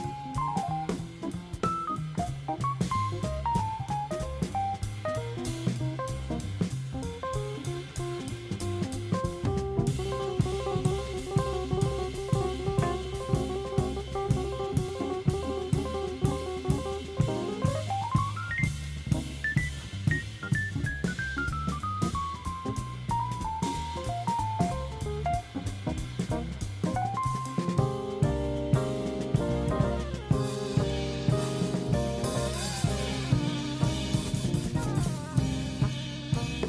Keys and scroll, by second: 28.3 shift+super+0, 29.0 super+c, 30.4 super+f.